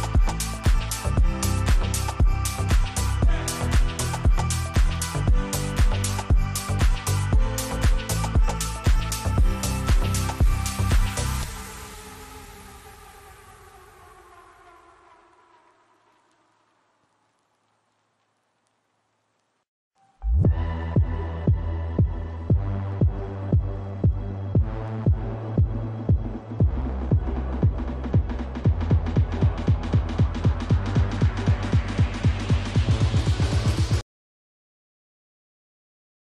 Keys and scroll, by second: 1.9 Delete, 7.8 Escape, 8.9 F3, 10.3 Escape, 18.9 space, 20.4 ctrl+r, 21.6 g, 26.3 space, 27.4 ctrl+r, 28.3 g, 34.7 space, 35.5 ctrl+r, 36.0 g.